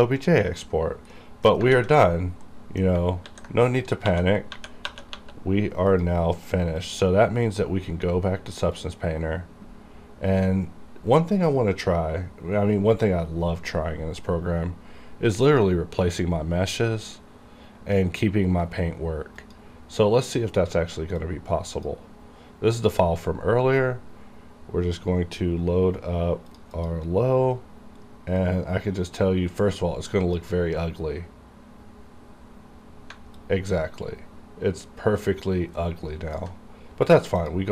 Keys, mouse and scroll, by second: 1.2 middle click, 1.5 scroll down 2, 1.8 alt+a, 2.1 middle click, 3.3-4.1 typing, 6.0 click, 9.0 click, 15.6 click, 15.6 click, 19.5 click, 20.3-24.4 drag, 26.6 click, 26.8 click, 28.4 click, 28.8-32.8 drag, 33.2 alt+Num_Lock, 33.2 click, 33.5-37.5 alt+drag.